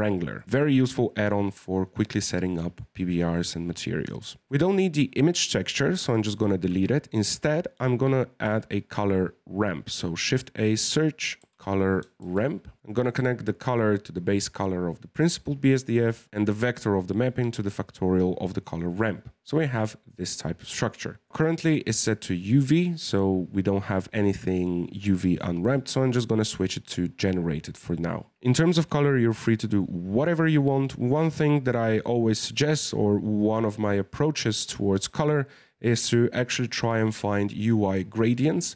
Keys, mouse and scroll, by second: 0.6-4.4 middle drag, 4.4 click, 6.0 x, 6.7 shift+a, 12.8-16.1 drag, 18.6-20.7 scroll up 3, 20.7-21.2 scroll up 1, 21.2-24.2 middle drag, 25.7-27.8 drag, 27.8 scroll up 1, 27.8-28.4 middle drag.